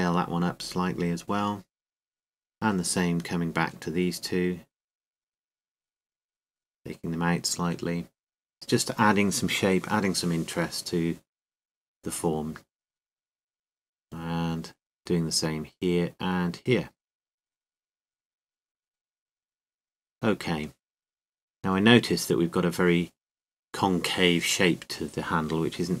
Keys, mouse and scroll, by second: 0.9-2.9 right drag, 1.5 s, 3.4-5.1 drag, 5.4-8.1 right drag, 6.8 s, 9.8-12.6 drag, 12.6 middle click, 12.8 z, 13.8 z, 17.9-20.7 right drag, 18.5 s, 20.7-22.8 drag, 22.8 middle click.